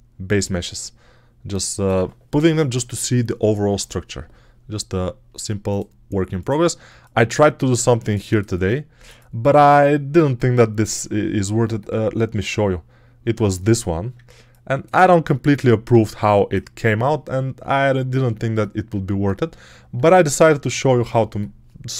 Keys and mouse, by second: 6.7-8.0 alt+right drag, 14.7 alt+click.